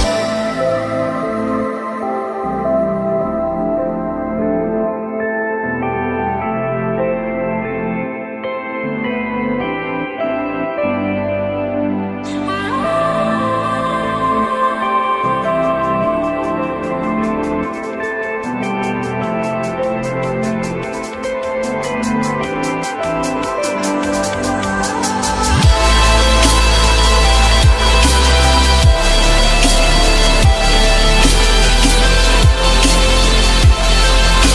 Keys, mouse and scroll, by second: 6.3 F3, 6.9 alt+middle click, 10.2 z, 13.0 alt+middle click, 13.6 alt+middle click, 13.8 alt+double middle click, 16.2-17.3 typing, 20.4-21.8 typing, 27.6 alt+middle click, 29.3 F3, 30.6 F3, 31.9 j.